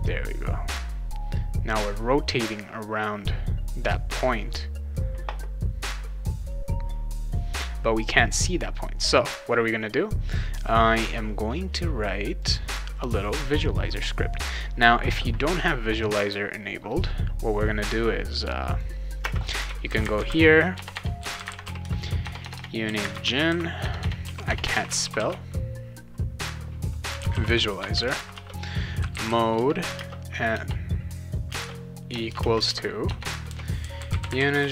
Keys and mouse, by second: 12.4 click, 13.9 click, 18.7 click, 19.2-25.7 typing, 26.8-34.7 typing.